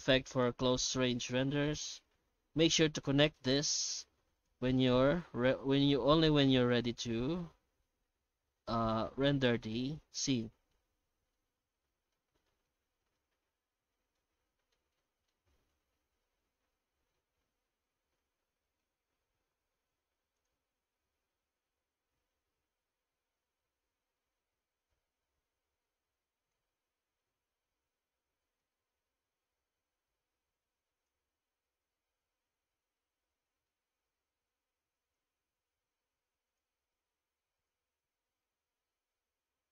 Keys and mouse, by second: 0.4-3.0 drag, 4.3-10.6 drag, 11.6-12.3 middle drag, 12.6 middle click, 13.3-14.4 middle drag, 14.9 middle click, 16.4 middle click, 17.9 middle click, 18.7-20.3 middle drag, 20.3 click, 27.0 middle click, 28.7-31.1 drag, 31.4-32.8 middle drag, 33.1 middle click, 35.0 click, 36.5 click.